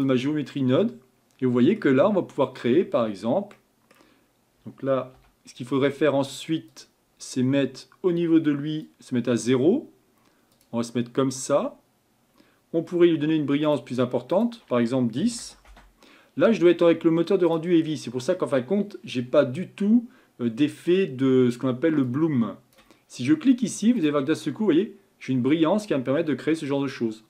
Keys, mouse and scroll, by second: 0.0 click, 5.2 a, 8.9-10.6 drag, 11.6 scroll up 2, 15.7-17.8 drag, 22.2-24.3 drag, 25.8-27.2 middle drag.